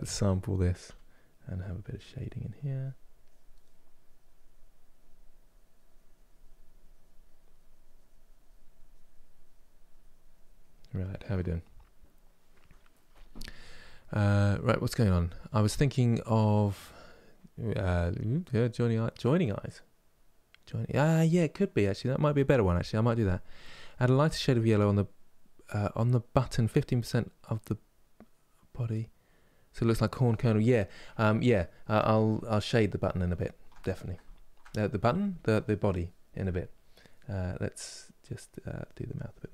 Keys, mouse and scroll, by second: 1.2-6.7 drag, 8.5-19.3 drag, 19.3-38.1 middle drag, 38.1-39.5 drag.